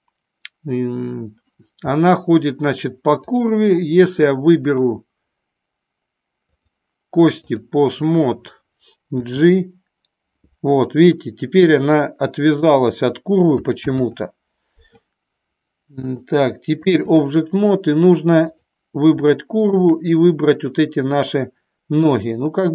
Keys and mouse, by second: 3.4 click, 4.8-6.9 drag, 7.4 click, 9.3 g, 12.6 click, 14.2 ctrl+z, 16.2-17.2 drag, 18.6 click.